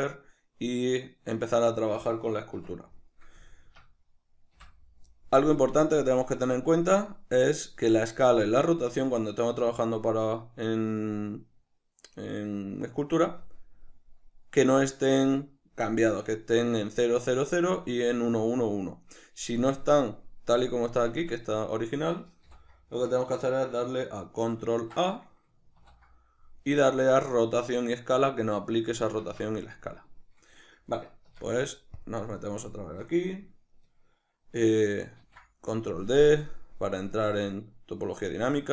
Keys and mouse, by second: 2.6 Tab, 4.6 n, 5.7 click, 21.0 Escape, 21.7-36.4 middle drag, 22.5 n, 24.5 ctrl+a, 29.2 Escape, 31.3 Tab, 35.2 ctrl+d, 36.4-38.7 drag.